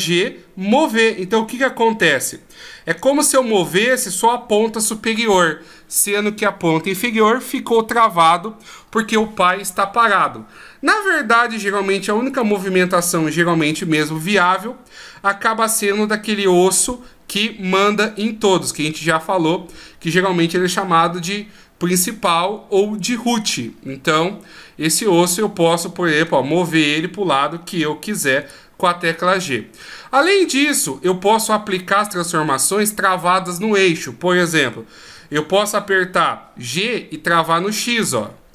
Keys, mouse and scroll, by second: 12.3 right click, 13.7 g, 30.2 middle click, 31.3 right click, 35.0 g.